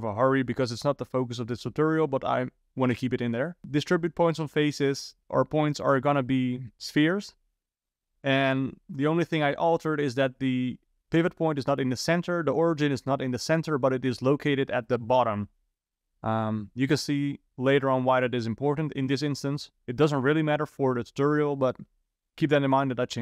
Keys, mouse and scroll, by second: 5.9 ctrl+shift+click.